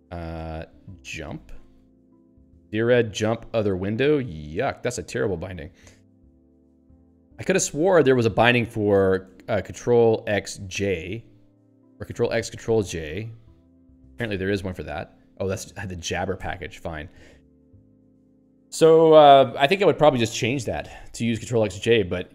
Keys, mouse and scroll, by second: 0.3 ctrl+s, 1.0-2.3 typing, 6.4 ctrl+g, 6.8 q, 14.1 ctrl+h, 16.2 click, 16.4 q, 20.7 Left, 22.2 Up.